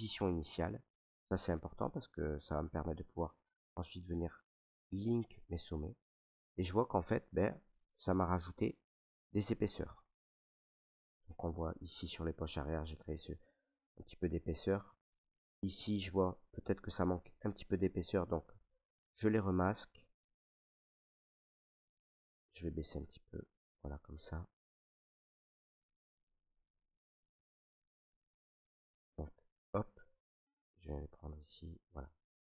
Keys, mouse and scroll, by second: 1.2 right click, 1.7 alt+right click, 2.5 right click, 3.1 alt+right click, 6.2 right click, 7.0 right click, 7.1 alt+right click, 7.6 ctrl+right click, 7.7 ctrl+right click, 8.9 alt+right click, 11.8 right click, 14.2 right click, 14.8 alt+right click, 16.1 ctrl+right click, 17.4 alt+right click, 18.4 click, 18.9 click, 20.1 ctrl+z, 21.0 ctrl+z, 22.2 s, 23.8 click, 24.9 click, 25.5 click, 26.7 click, 27.7 click, 27.7 right click, 28.2 right click, 28.8 ctrl+right click, 28.9 ctrl+right click, 29.5 right click, 30.5 ctrl+right click, 31.4 click, 31.9 ctrl+right click, 32.3 ctrl+right click.